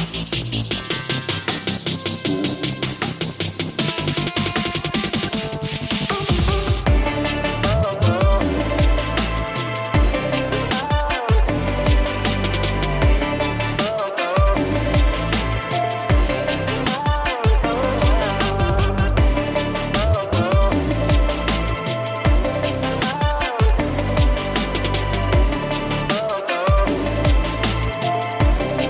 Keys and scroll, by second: 0.2 [, 1.4 alt+space, 2.1 ], 2.3 [, 2.4 ], 18.4 ctrl+z, 18.5 ctrl+z, 18.6 ctrl+z, 18.9 ctrl+z, 19.1 ctrl+z, 19.2 ctrl+z, 19.4 ctrl+z, 19.6 ctrl+z, 21.5 space, 25.8 e, 25.9 space, 26.6 alt+space, 28.0-28.4 typing.